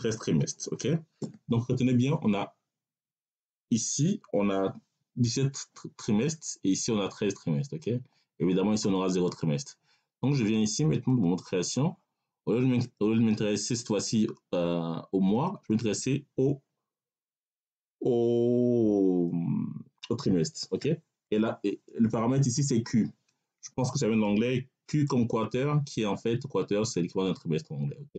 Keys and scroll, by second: 21.1 BackSpace, 22.7 q.